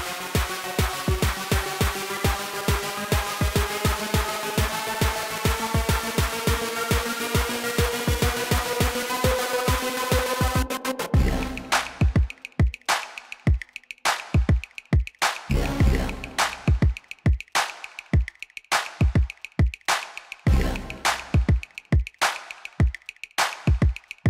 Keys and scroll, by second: 4.5 shift+a, 10.1 r, 10.3 y, 10.6 9, 10.8 0, 10.9 Return, 11.9 Tab, 12.8 s, 14.5 g, 14.9 z, 19.7 s, 19.9 z, 22.1 g, 22.5 z.